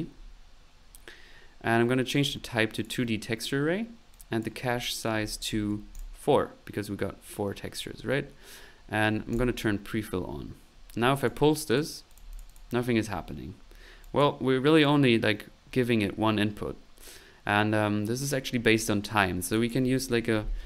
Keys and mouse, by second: 0.1-1.1 middle drag, 2.1 click, 2.7 click, 4.1 click, 6.9 middle click, 7.9 middle click, 9.3 click, 11.2 click, 11.7 click, 12.1 click, 13.7 middle click, 14.0 click, 14.7 click, 19.5 click, 19.8 click.